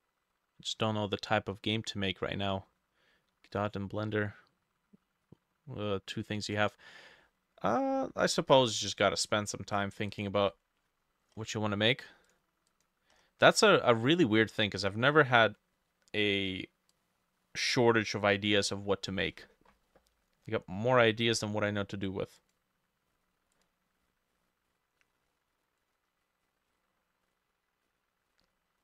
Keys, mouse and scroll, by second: 8.3 click, 8.3 middle click, 8.6-9.1 scroll up 5, 9.1 middle click, 11.3-12.5 scroll up 2, 12.7 double click, 13.2-13.8 scroll up 1, 18.7-22.5 drag, 18.7 scroll up 1, 18.8-21.5 scroll down 11, 21.5-22.5 scroll down 1, 22.5 scroll down 1, 26.8-28.8 drag, 26.8-28.3 scroll down 4, 28.3-28.8 scroll down 9.